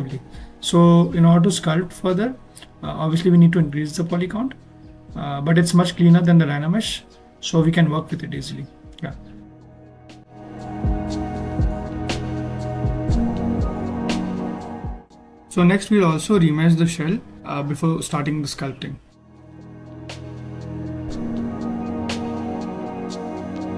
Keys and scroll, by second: 21.6 alt+shift+f.